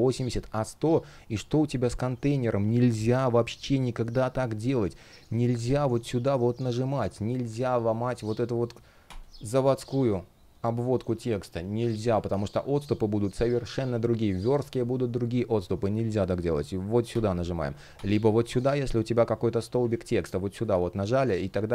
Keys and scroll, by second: 2.9 super+\, 11.7 super+z.